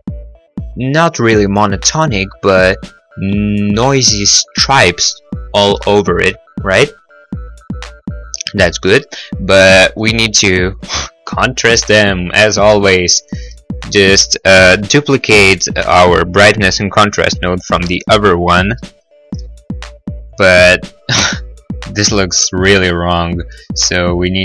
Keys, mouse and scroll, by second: 6.2 middle click, 6.4 middle click, 7.1-7.8 scroll, 9.3 middle click, 9.8 middle click, 13.2 right click, 13.3 right click, 19.5 shift+d, 20.4 click, 24.1 click.